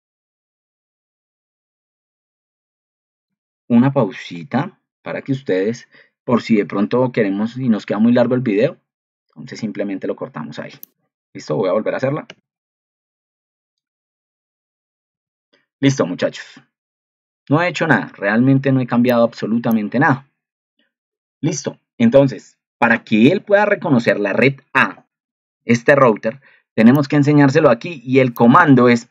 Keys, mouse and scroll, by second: 4.4 ctrl+2, 15.2 ctrl+alt+2.